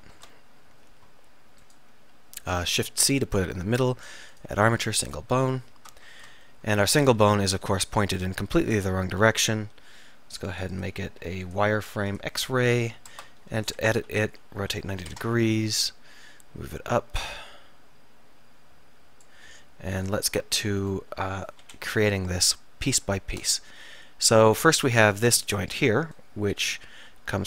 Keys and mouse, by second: 0.9 Tab, 2.8 shift+c, 6.0-7.3 middle drag, 7.3 KP_1, 13.2 Tab, 14.0 a, 14.7 r, 21.7 KP_7, 27.2 e.